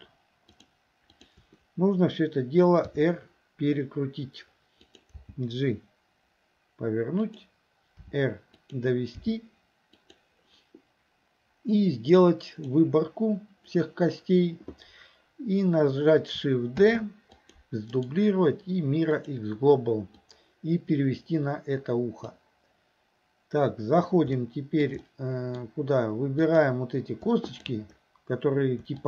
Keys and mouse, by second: 0.6 shift+click, 1.2 shift+click, 2.9 r, 5.2 g, 8.0 r, 9.2 g, 12.4 click, 16.8 shift+d, 18.0-19.3 right drag, 20.3-22.3 drag, 24.4 shift+middle click, 25.1 middle click, 27.6 shift+click.